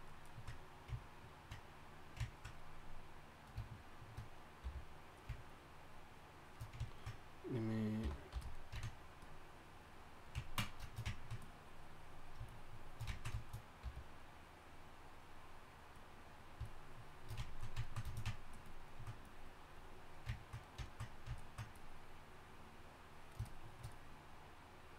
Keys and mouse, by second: 4.6-7.8 drag, 4.6 f, 8.0 y, 8.3 f, 10.4-24.9 drag, 13.8 f.